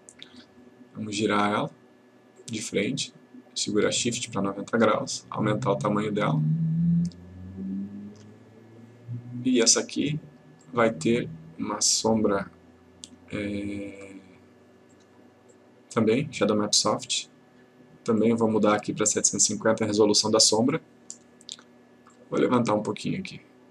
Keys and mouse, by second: 5.5-6.4 click, 10.7 click, 15.0 click, 18.3 click, 20.6 click, 23.5-23.7 click.